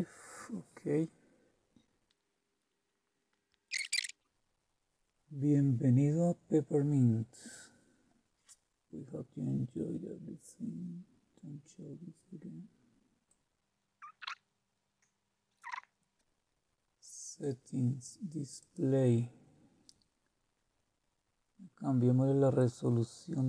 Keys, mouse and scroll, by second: 2.1 Return, 13.3 click, 14.2 click, 14.8 click, 15.8 click, 17.0 click, 18.6 click, 22.6 click.